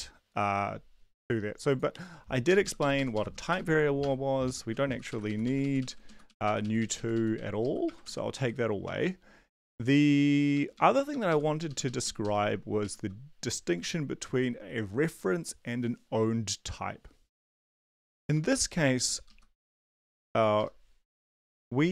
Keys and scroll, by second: 2.5 shift+Up, 2.6 shift+Up, 2.8 shift+Up, 3.5 BackSpace, 4.0 BackSpace, 4.4 Up, 4.7 Down, 4.9 Down, 5.1 Right, 5.6 ctrl+Right, 6.0 Down, 6.3 Right, 6.8 ctrl+Right, 7.3 Right, 7.6 Left, 7.8 BackSpace, 8.0 ctrl+s, 8.3 Up, 8.8 Up, 9.7 Down, 10.7 Up, 10.9 Up, 11.7 Left, 12.2 ctrl+Left, 12.8 shift+Right, 18.4 &, 18.7 Right, 18.9 Right, 19.3 Left, 20.6 BackSpace, 21.2 ctrl+s.